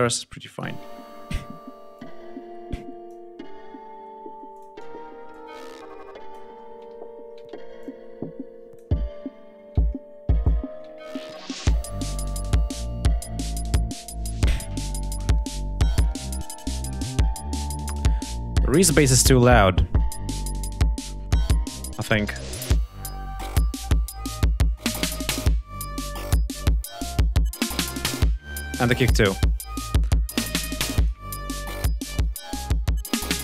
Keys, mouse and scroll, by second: 0.1 click, 0.4 space, 0.7 ctrl+scroll down 2, 1.7-3.0 drag, 3.2 scroll up 2, 4.3 ctrl+click, 5.1-6.3 ctrl+drag, 6.4 ctrl+scroll up 2, 6.9 ctrl+scroll down 2, 7.6-8.7 ctrl+drag, 8.7 ctrl+scroll down 2, 10.2-11.3 ctrl+drag, 12.2 ctrl+scroll up 2, 18.0-18.3 scroll up 2, 19.4-19.7 scroll up 2, 20.4 click, 25.3-26.5 scroll up 6, 28.6-29.4 scroll down 4, 30.4 click, 31.3 click, 33.3 ctrl+scroll down 2.